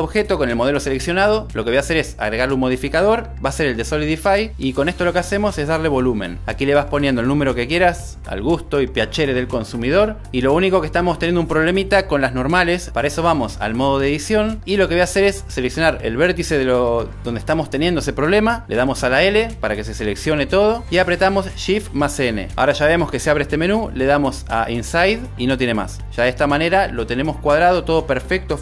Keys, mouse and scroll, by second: 0.0 Tab, 1.8-10.4 drag, 19.8 l, 22.2 shift+n, 25.0 click.